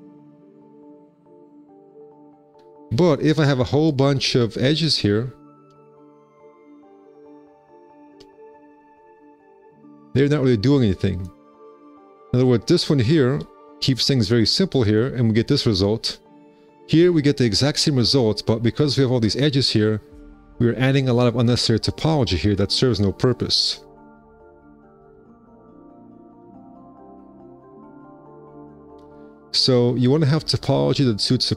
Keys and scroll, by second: 1.1 q, 2.5 space, 2.8 2, 4.0 shift+r, 4.2 5, 6.3 shift+r, 6.5 c, 8.5 shift+r, 8.7 c, 10.6 space, 11.2 F4, 11.5 2, 12.0 F4, 14.2 space, 15.7 F4, 18.4 F4, 19.6 space, 20.0 4, 25.4 4, 28.5 z.